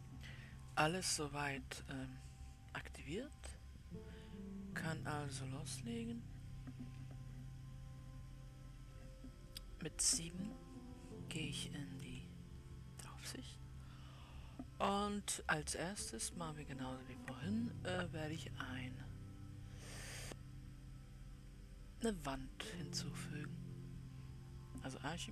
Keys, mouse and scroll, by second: 12.1 click, 12.5 KP_7.